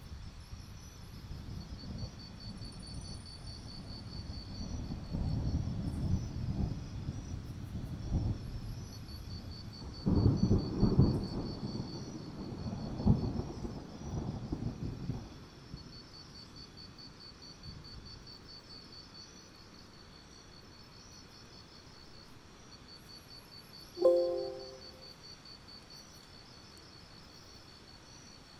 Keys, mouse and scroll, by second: 0.0-0.7 scroll down 1, 1.0 shift+click, 1.2 right click, 2.3 click, 3.0 alt+scroll down 1, 3.3-4.2 scroll up 1, 5.1 click, 6.2-6.5 scroll up 2, 6.5 scroll down 2, 7.1 scroll up 1, 7.3-8.4 scroll down 1, 8.4-9.0 scroll up 1, 9.1-9.5 ctrl+scroll up 1, 10.5 click, 10.7-12.3 scroll down 1, 12.3-13.4 scroll up 1, 13.4-13.8 scroll down 1, 15.7-16.6 scroll up 1, 16.6-17.1 scroll down 1, 17.1 right click, 17.5 click, 17.8-19.6 scroll up 1, 19.6 click, 19.8 alt+scroll up 1, 20.8-22.8 drag, 26.7-27.1 alt+scroll up 1, 27.1-28.5 drag.